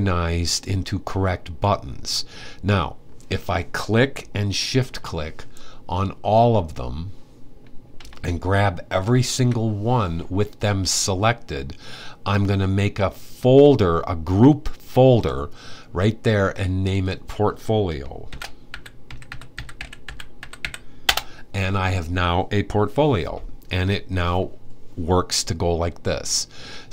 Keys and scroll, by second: 17.7-20.7 typing.